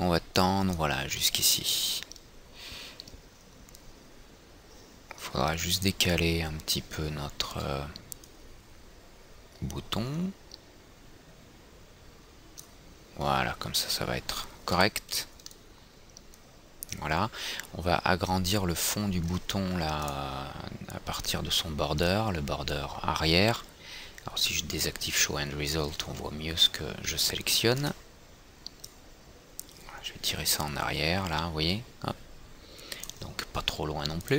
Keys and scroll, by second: 7.8 w, 15.0 F3.